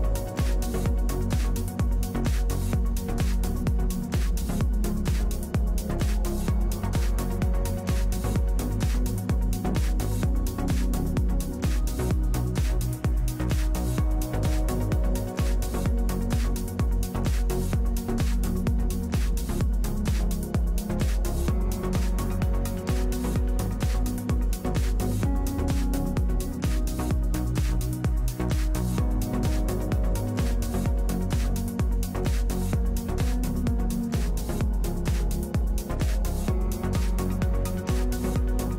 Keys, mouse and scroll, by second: 0.4 right click, 3.9 middle click, 4.8-7.4 drag, 8.0-25.1 drag, 25.2-34.6 drag, 35.1-38.7 drag.